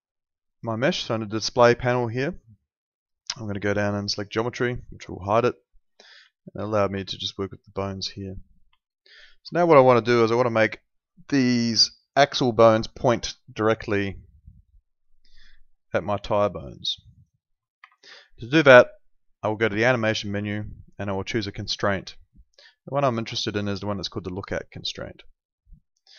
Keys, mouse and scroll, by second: 4.1 click, 4.6 alt+middle click, 6.3 alt+middle click, 7.0 alt+middle click, 8.8 alt+middle click, 9.5 alt+middle click, 10.9 click, 14.6 ctrl+2, 17.8 Escape, 19.5 click, 24.8 click.